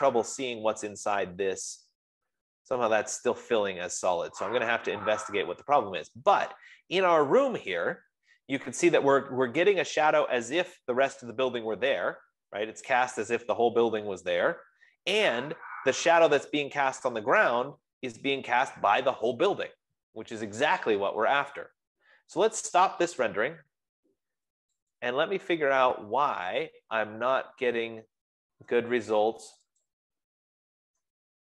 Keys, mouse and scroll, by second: 1.6-2.2 scroll, 3.2 scroll, 4.6 middle click, 15.9-21.0 middle drag, 23.7-31.1 drag.